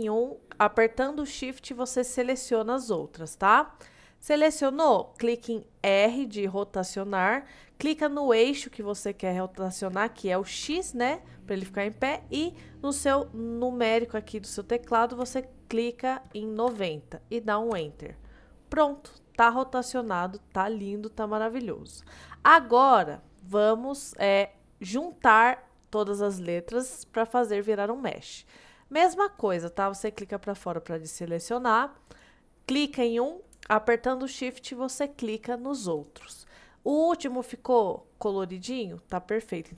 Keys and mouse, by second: 1.7 shift+click, 3.0-3.5 shift+drag, 5.9 r, 10.7 x, 15.3 KP_9, 16.7 KP_0, 17.8 KP_Enter, 19.0-19.5 middle drag, 19.9-21.5 middle drag, 32.1 click, 34.6 shift+click, 35.3 shift+click.